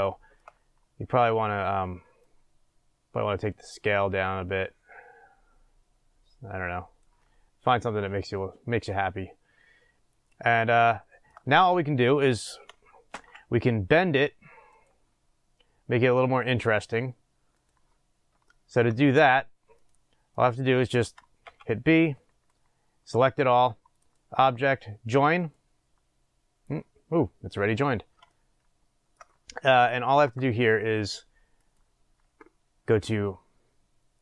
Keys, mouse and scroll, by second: 0.5-1.2 scroll up 2, 1.2-2.3 scroll up 1, 2.3-8.3 drag, 7.5-8.1 scroll down 1, 8.3-14.7 middle drag, 11.3 scroll up 1, 11.5-12.3 scroll down 1, 14.7 click, 17.6 click, 18.4-22.4 shift+middle drag, 18.9-21.4 scroll down 2, 21.4-22.4 scroll down 1, 22.4 b, 28.3-34.2 shift+middle drag.